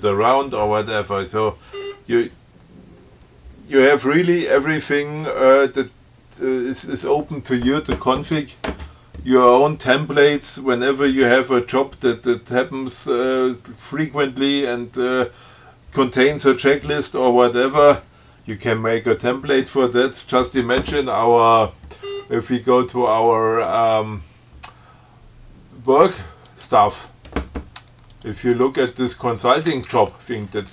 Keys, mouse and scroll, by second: 1.1 scroll up 2, 2.0 scroll up 2, 22.3 scroll up 1, 23.4 click, 26.8 click, 28.4 click, 28.8 click, 29.0 Tab, 29.7 click, 30.0 Tab.